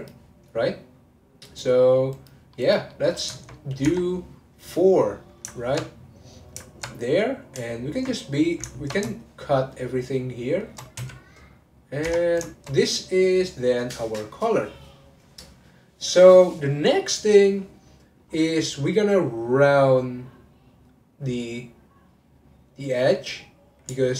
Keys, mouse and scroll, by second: 1.4 click, 2.1 click, 2.5-3.8 middle drag, 3.8 Tab, 5.5 ctrl+middle click, 6.2 click, 6.7 ctrl+click, 7.7 alt+click, 8.7 ctrl+middle click, 9.6 shift+click, 11.0 x, 12.0 Tab, 12.5-15.7 shift+middle drag, 18.3-20.8 scroll up 2.